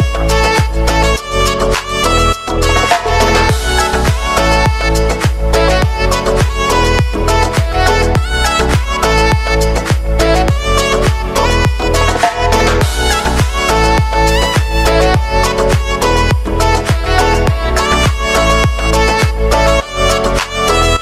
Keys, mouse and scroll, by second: 0.1 Return, 1.0 click, 1.9 s, 2.9 click, 3.7-5.1 typing, 5.9 click, 7.6 j, 7.9 click, 11.3-12.5 typing, 13.0 click, 16.4 u, 17.5 j, 18.6 click, 20.2 k.